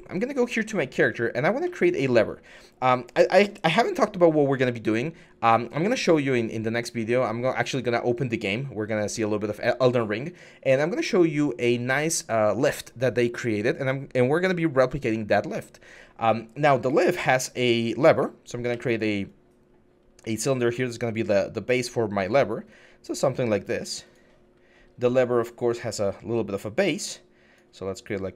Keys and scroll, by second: 17.5 r, 18.2 r, 18.5 e, 20.4 t, 26.0 t.